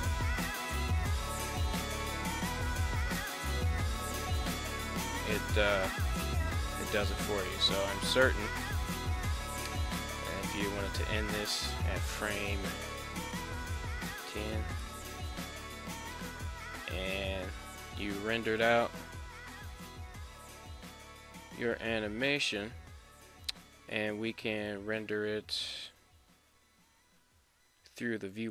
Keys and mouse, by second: 1.0 space, 2.4 space, 3.5-4.6 drag, 6.0 space, 7.6 space, 8.6 click, 8.8 click, 10.1-15.7 drag, 17.5-22.9 drag, 24.4-28.5 drag.